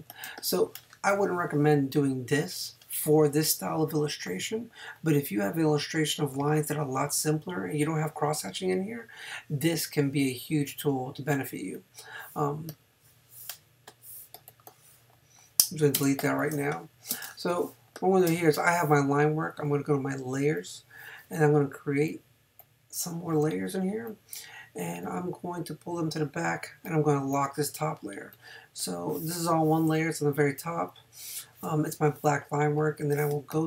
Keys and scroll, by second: 15.9 BackSpace, 31.6 space, 33.3 space.